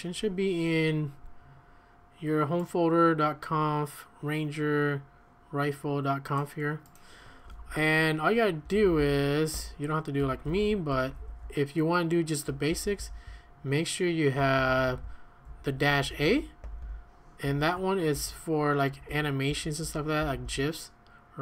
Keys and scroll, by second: 7.4 Escape, 7.6 Escape, 8.4-14.7 typing, 10.9 Escape, 15.5 Escape, 15.6 Escape, 15.9-20.4 typing, 18.9 Escape.